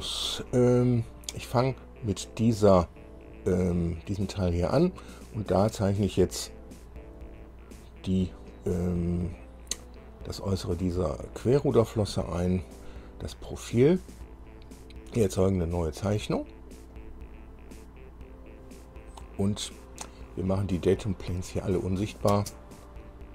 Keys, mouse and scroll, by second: 1.0 click, 17.1 click, 21.2 click, 21.9 shift+click, 22.5 shift+space.